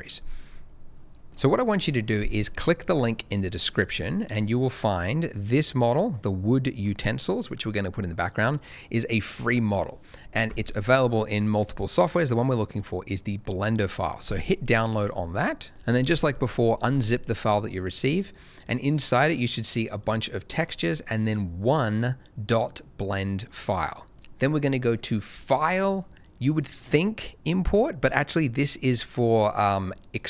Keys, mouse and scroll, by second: 15.7 click, 19.2 double click, 20.5 click, 24.1 click.